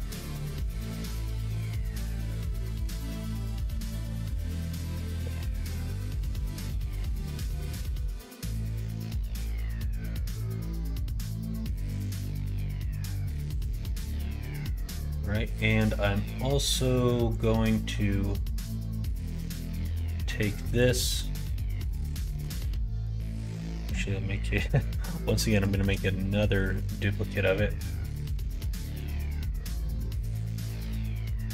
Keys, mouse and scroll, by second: 14.7 middle click, 16.6 click, 17.2 click, 18.6 click, 19.3 middle click, 21.1-22.4 middle drag, 22.8 middle click, 25.1 middle click, 28.4 shift+d, 30.5 click, 31.2 middle click.